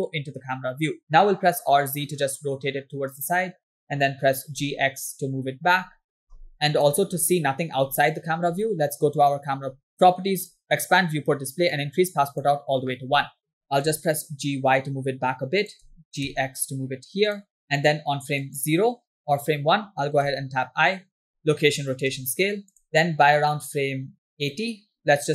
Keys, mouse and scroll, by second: 1.2 r, 4.0 g, 6.5 click, 6.5 scroll down 2, 7.2 scroll up 2, 7.9 scroll down 1, 10.5 click, 11.1 scroll down 1, 11.7 click, 13.7 g, 16.0 g, 19.0 click, 20.4 i, 22.1 i, 25.1-25.3 drag.